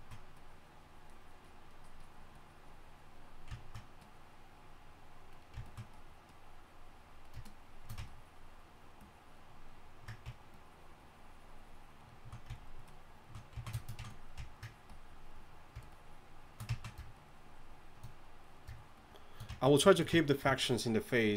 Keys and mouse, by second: 10.2-21.3 drag.